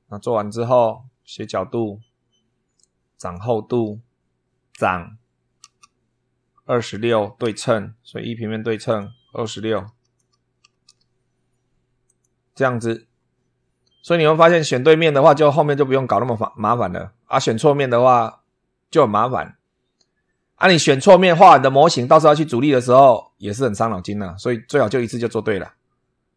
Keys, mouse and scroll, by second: 1.0 click, 3.0 click, 7.2 super+3, 8.6 click, 9.5 click, 10.4 2, 10.6 6, 11.8 click.